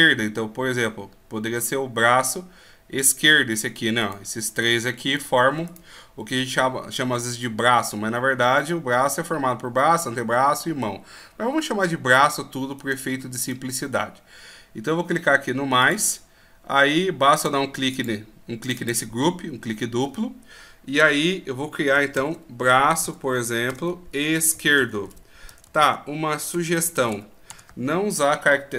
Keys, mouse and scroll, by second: 3.0 right click, 12.8 right click, 15.8 right click, 15.8 click, 25.6 BackSpace.